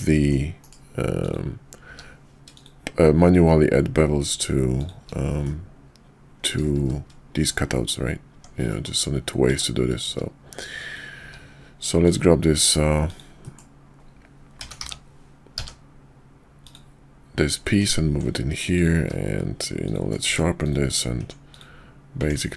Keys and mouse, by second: 0.6 KP_5, 1.1 click, 1.9 q, 5.3 middle drag, 6.7 shift+2, 7.7 middle click, 8.3 Tab, 8.7 middle click, 9.9 q, 10.7 click, 11.2 q, 13.4 middle click, 14.6 g, 17.5 middle drag, 18.6 click, 19.0 q, 20.3 Tab, 20.6 click, 21.5-22.5 drag.